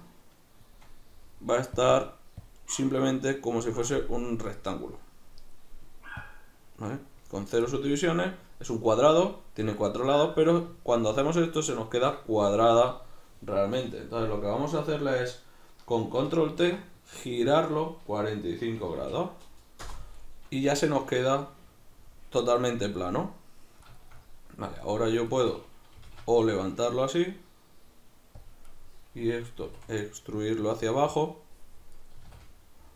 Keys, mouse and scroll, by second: 4.0-6.2 middle drag, 6.2-7.7 drag, 7.7-24.9 middle drag, 16.5 ctrl+t, 19.9 Return, 24.9 right drag, 25.3 shift+right click, 26.0 g, 28.5 click, 28.7 right click, 29.6 e, 30.7 click, 32.0 right click, 32.2 e.